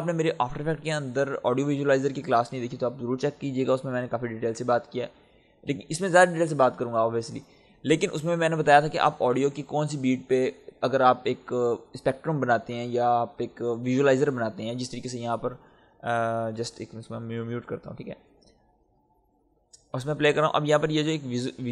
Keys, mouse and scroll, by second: 17.6 click, 18.1 space, 19.4 click.